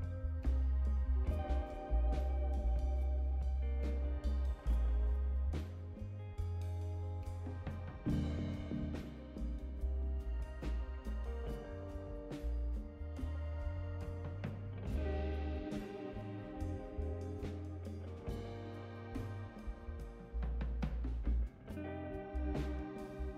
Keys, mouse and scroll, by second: 0.1 click, 2.0-4.8 drag, 6.8 click, 8.4 click, 10.9 click, 11.5 click, 12.4-17.3 drag, 18.0 click, 18.5-20.6 drag, 22.6 click.